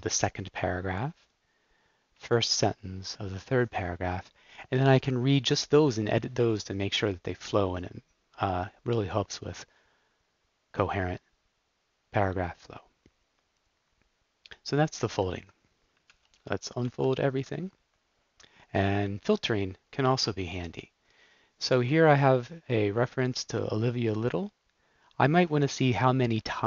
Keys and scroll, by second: 2.2 super+l, 16.0 super+k, 16.8 u, 19.4 Up.